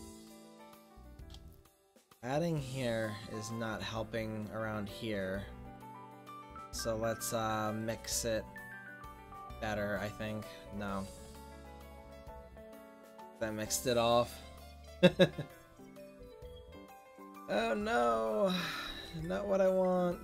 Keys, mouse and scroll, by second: 2.6-3.7 drag, 11.6 ctrl+z.